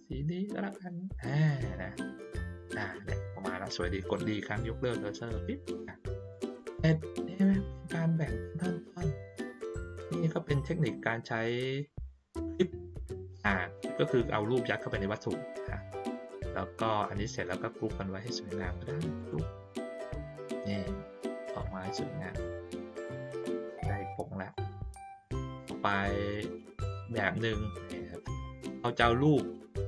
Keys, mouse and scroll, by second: 6.3 click, 7.5 ctrl+middle click, 7.5-8.0 ctrl+scroll down 1, 8.7 ctrl+middle click, 8.7 ctrl+scroll up 1, 9.5-10.9 drag, 19.1 click, 20.5-21.5 drag, 21.8-22.4 middle drag, 22.9 ctrl+middle click, 23.5 click, 24.5 middle click, 25.2 middle click, 25.9 middle click, 26.5 middle click, 27.4 ctrl+scroll up 1, 27.9 middle click, 29.0 ctrl+middle click, 29.5 middle click.